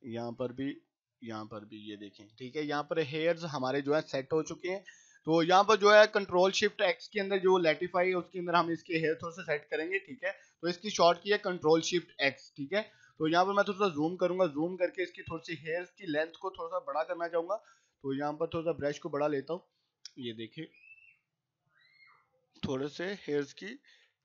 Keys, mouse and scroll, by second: 3.4 right click, 3.6 click, 12.7-13.9 drag, 17.0-18.1 typing, 18.8-19.8 drag.